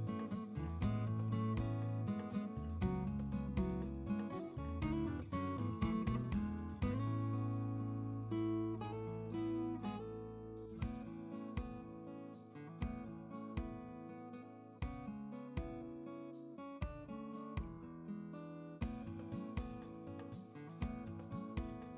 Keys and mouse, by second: 4.2 a.